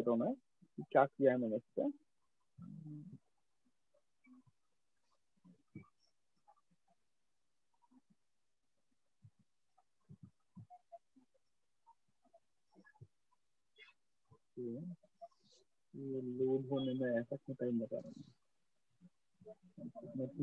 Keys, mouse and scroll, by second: 3.1 click, 9.0 click, 16.9 click, 18.8 right click.